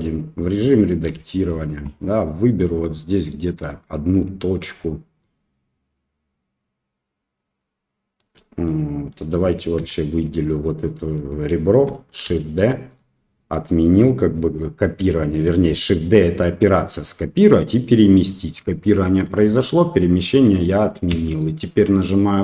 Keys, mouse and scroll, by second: 1.1 1, 5.2-8.2 shift+drag, 8.6 middle click, 9.0 click, 9.7 2, 10.3 click, 12.2 shift+d, 21.0 p.